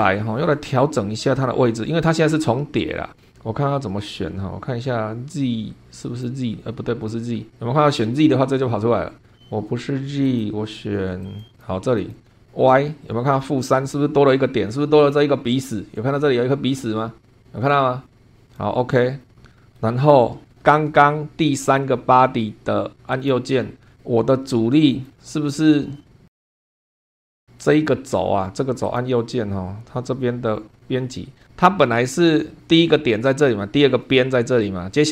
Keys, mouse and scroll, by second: 0.0 scroll down 2, 1.0-1.9 middle drag, 2.9 scroll down 2, 6.0 click, 10.2 click, 11.2 click, 12.0 click, 13.4-13.8 scroll up 1, 18.4 click, 19.2 scroll down 1, 19.5 middle click, 20.0 scroll down 1, 20.6 shift+middle click, 21.6 click, 23.2 right click, 24.9 click, 26.8 click, 27.3 click, 27.6 click, 28.8 right click, 30.7 click, 31.5 middle click.